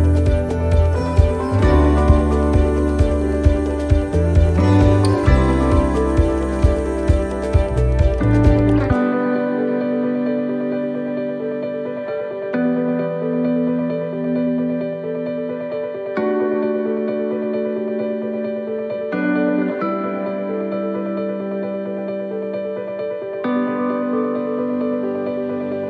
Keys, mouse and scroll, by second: 0.3-0.6 scroll down 1, 0.7 middle click, 1.2-1.9 scroll up 4, 1.9 middle click, 3.4-3.7 scroll down 1, 4.4 right click, 5.9 click, 6.9 right click, 7.4 shift+right click, 8.1 middle click, 8.8 shift+middle click, 9.3-9.7 scroll up 2, 9.8 middle click, 10.3-10.7 scroll down 1, 11.2-11.6 scroll down 1, 11.6 middle click, 12.3 click, 14.2 click, 14.6 click, 18.5 s, 19.8 middle click, 19.9-20.5 scroll up 3, 20.5 middle click, 22.5 ctrl+r, 24.0 s.